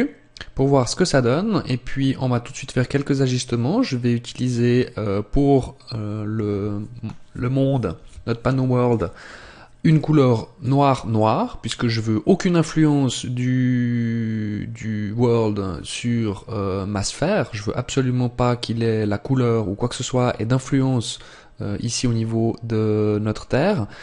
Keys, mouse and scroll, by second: 2.7 click, 5.9 click, 8.7 click.